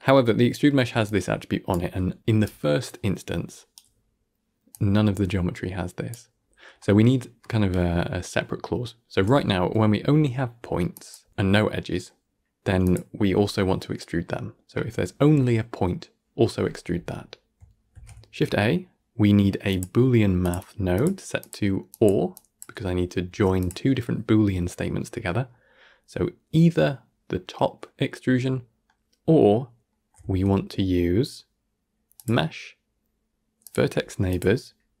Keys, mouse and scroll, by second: 2.3-3.6 right drag, 3.6 d, 6.7-8.4 middle drag, 10.1 middle click, 10.6 scroll up 1, 11.9 middle click, 12.3 g, 17.8 shift+a, 23.2 g, 25.2 middle click, 25.7 scroll up 1, 26.3-28.3 scroll up 1, 28.3-30.1 middle drag, 30.1 shift+a, 34.5-35.0 scroll up 2.